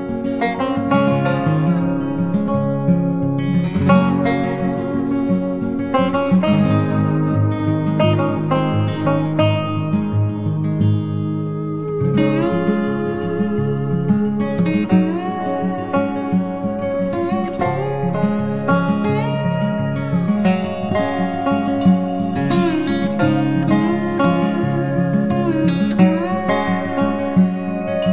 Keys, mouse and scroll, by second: 25.2 alt+click.